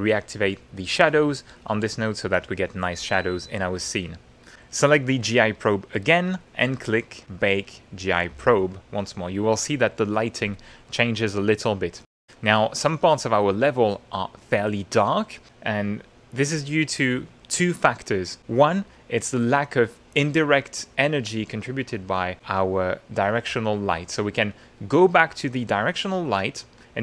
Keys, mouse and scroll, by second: 0.4 click, 3.6 click, 4.8 click, 7.2 click, 11.3-12.7 drag, 12.7-14.1 middle drag, 15.1 middle click, 22.6 click, 25.5 click.